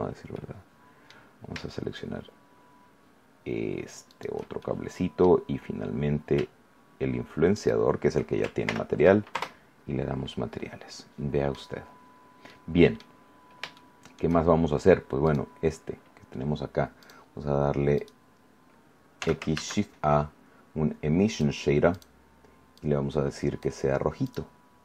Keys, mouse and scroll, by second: 0.3 middle click, 4.0 shift+right click, 4.5 shift+middle click, 5.7 scroll up 1, 7.5 shift+right click, 8.6 ctrl+l, 9.5 ctrl+Return, 10.1 scroll down 2, 10.5-11.7 middle drag, 12.1 scroll down 2, 12.4-14.3 middle drag, 13.1-13.7 scroll up 1, 15.2 right click, 16.9 click, 17.9 right click, 19.1 x, 19.5 shift+a, 21.3 click, 21.9 click, 22.7-23.7 drag, 24.2 click.